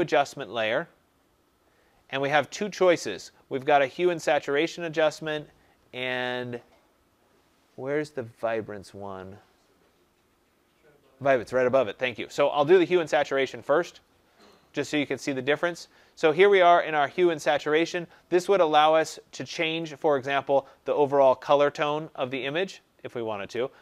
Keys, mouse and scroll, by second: 13.1 click, 14.4 click, 23.4 click.